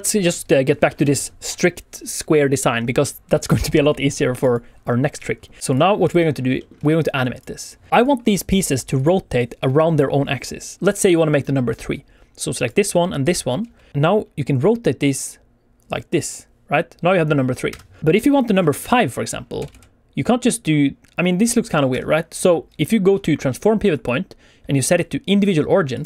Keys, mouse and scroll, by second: 0.1-0.6 scroll up 2, 0.6 scroll down 1, 0.8 shift+middle click, 4.4 click, 5.5 click, 5.6 click, 6.0 click, 6.6 shift+middle click, 7.3 click, 7.9 click, 8.4 click, 8.9 click, 9.5-10.8 click, 10.7 click, 12.3 click, 13.2 shift+click, 13.9 r, 17.6 Escape, 18.0 alt+a, 18.3 click, 18.8 shift+click, 19.5 r, 19.7 r, 21.9 Escape.